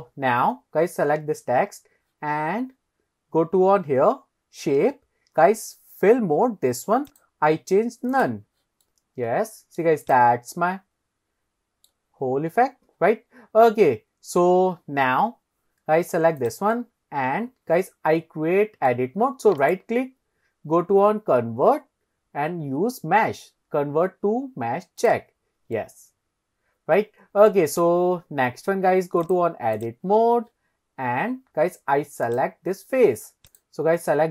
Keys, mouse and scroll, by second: 2.9-3.6 scroll up 2, 7.1-8.3 drag, 8.9-9.8 middle drag, 10.1 click, 10.6-11.9 middle drag, 14.0-14.5 scroll down 2, 14.5-15.6 scroll up 1, 16.4 click, 16.8-18.9 middle drag, 19.6-25.1 right drag, 25.8-27.5 middle drag, 27.7 click, 29.3-29.6 drag, 32.3 click, 33.5 click.